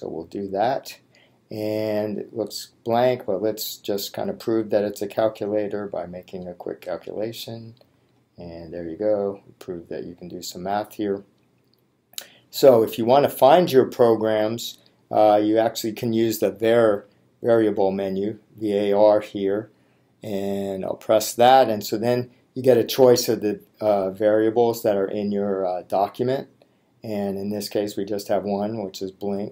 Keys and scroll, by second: 0.2 Return, 5.3 2, 6.7 3, 8.0 Return.